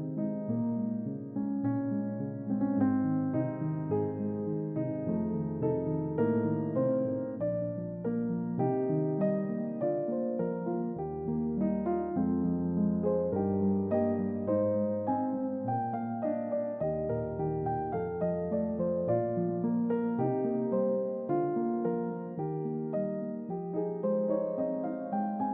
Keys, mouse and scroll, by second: 3.0-3.8 typing, 3.3 click, 14.0 click, 14.4 g, 16.0 click, 18.9 typing, 23.7 click.